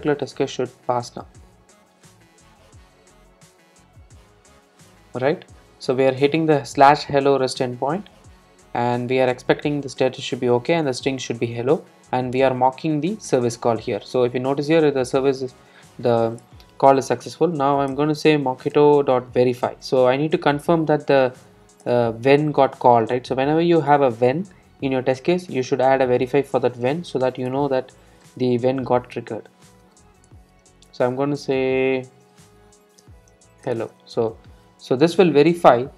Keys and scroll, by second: 18.0 Return, 27.5 Return.